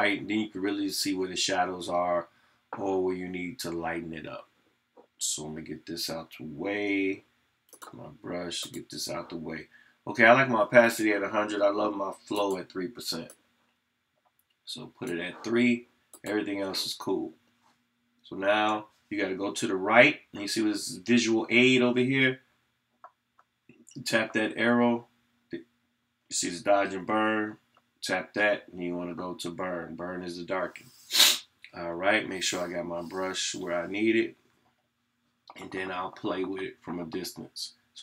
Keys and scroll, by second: 35.5 ].